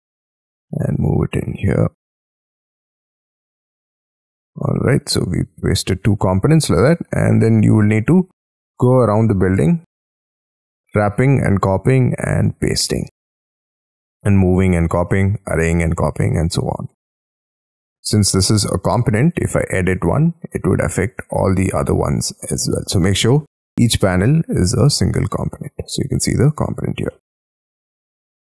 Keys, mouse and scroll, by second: 0.6 m, 0.8 shift+middle click, 1.8-3.4 scroll up 8, 3.4-4.4 scroll down 16, 4.4 middle click, 6.3 space, 6.6-7.1 scroll down 6, 7.1 middle click, 7.8-8.5 scroll down 9, 8.5 middle click, 9.6-10.0 scroll down 9, 10.4-11.8 scroll up 17, 12.0-12.7 scroll down 13, 14.0 scroll up 5, 17.0 scroll up 6, 18.1 double click, 18.2 double click, 18.5 double click, 18.7 double click, 18.9 double click, 19.2 double click, 19.9 j, 20.3-21.1 scroll down 12, 21.1 scroll up 1, 21.2 middle click, 22.6 j, 23.1 Escape, 23.2-27.1 scroll up 9, 27.1 middle click, 27.6 Escape.